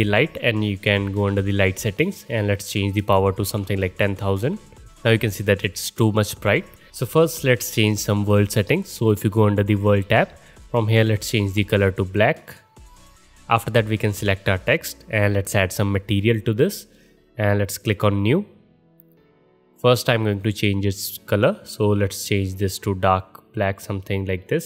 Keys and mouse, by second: 1.2 click, 1.3-2.5 middle drag, 2.5-4.9 drag, 3.8 KP_0, 4.9-9.7 middle drag, 9.7 click, 9.8-11.0 middle drag, 11.0 click, 11.2-11.9 middle drag, 11.9 click, 12.0-13.1 middle drag, 12.1 click, 13.1 click, 13.2 middle click, 14.1 click, 14.2-16.2 middle drag, 16.2 click, 16.3-17.8 middle drag, 17.8-20.6 drag, 20.6-24.6 middle drag.